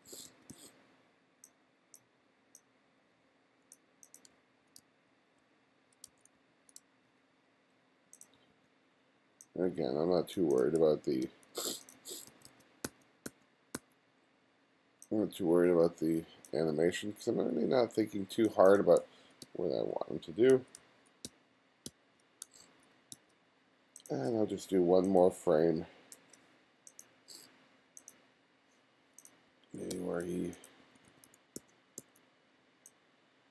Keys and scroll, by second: 4.3 f, 4.8 g, 6.1 f, 6.8 g, 8.4 b, 10.8 f, 11.3 g, 12.0 b, 19.0 f, 19.5 g, 20.5-23.2 typing, 26.2 shift+=, 29.5 f, 29.9 g, 30.8 b.